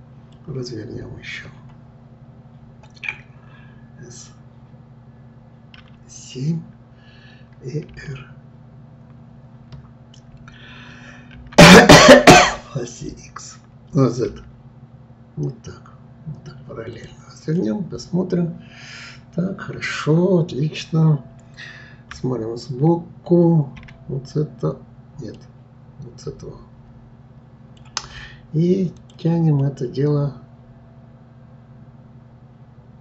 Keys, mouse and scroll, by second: 0.3-3.3 middle drag, 5.8 KP_7, 7.9 r, 17.6-20.7 middle drag, 22.1 KP_3, 25.4-28.4 middle drag, 29.0 click, 29.6-32.6 middle drag.